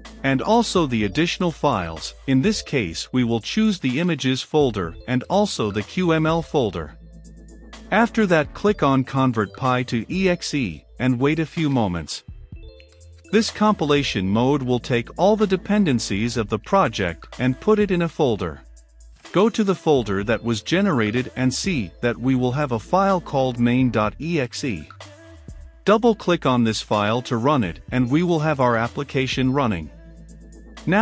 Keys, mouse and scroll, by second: 8.2-9.9 middle drag, 8.2-9.9 scroll, 9.9-21.0 drag, 21.0 middle click, 21.7-28.6 drag, 28.3-30.0 typing, 30.5-31.0 drag.